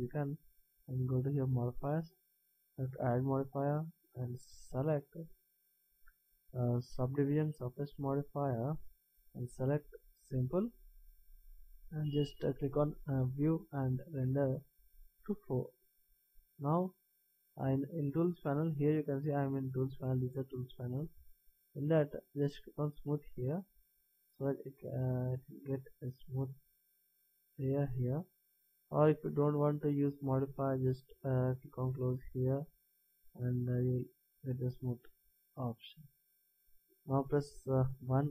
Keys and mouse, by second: 1.2-4.7 drag, 10.3-12.1 drag, 12.6-17.6 drag, 23.1-24.9 drag, 26.6 middle click, 31.8-33.8 drag, 35.7 middle click, 38.2 KP_1.